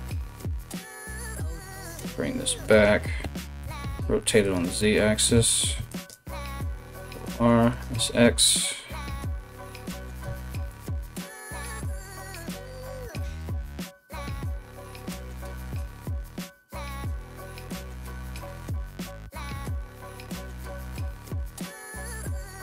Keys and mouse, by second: 0.4 right click, 1.1 g, 2.8 r, 5.1 ctrl+r, 6.6 s, 9.8 2, 10.3 right click, 11.2 g, 11.8 click, 12.0 ctrl+click, 12.2 g, 12.8 click, 12.9 f, 13.2 ctrl+z, 13.3 g, 13.5 click, 13.7 g, 14.4-15.5 middle drag, 15.3 3, 15.5 right click, 15.7 ctrl+middle click, 15.7 right click, 16.0 right click, 16.0 middle click, 16.1 right click, 16.4 ctrl+middle click, 16.6 ctrl+right click, 16.7-20.3 ctrl+middle drag, 16.9 ctrl+right click, 17.4 alt+q, 17.5 alt+q, 18.1 right click, 18.3 ctrl+right click, 18.7 ctrl+right click, 19.1 alt+q, 19.1 alt+q, 19.6 KP_3, 20.3 ctrl+shift+right click, 20.6 ctrl+middle click, 21.0-22.6 middle drag, 21.1 KP_3, 21.6 alt+s.